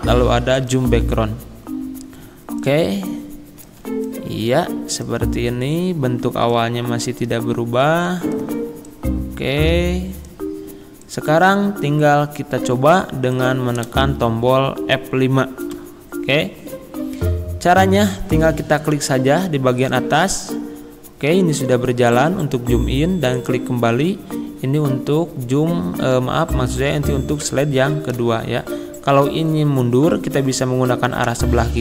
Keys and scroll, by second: 15.8 F5, 28.2 Left, 31.3 Left.